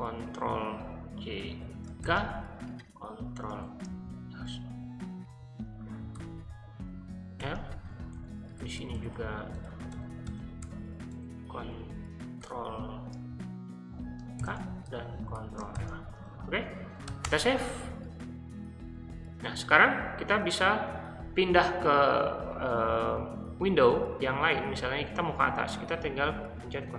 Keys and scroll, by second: 0.0-0.4 typing, 1.6-6.1 typing, 7.4-11.1 typing, 12.4 r, 14.1-17.5 typing.